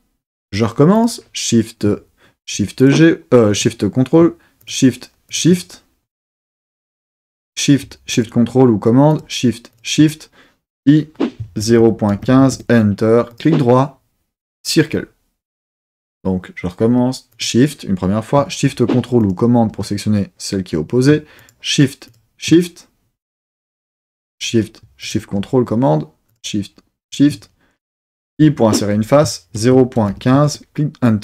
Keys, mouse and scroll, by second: 0.9 click, 2.8 shift+super+click, 4.6 shift+click, 5.3 shift+click, 7.3 shift+click, 8.1 shift+super+click, 9.1 shift+click, 9.7 shift+click, 10.7-12.2 typing, 12.5 KP_Enter, 13.3 right click, 17.3 click, 19.2 shift+super+click, 21.4 shift+click, 22.0 shift+click, 24.1 shift+click, 25.0 shift+super+click, 26.3 shift+click, 27.0 shift+click, 28.3 i, 29.5 shift+KP_0, 29.7 shift+KP_Decimal, 30.0 shift+KP_1, 30.1 shift+KP_5, 30.4 KP_Enter.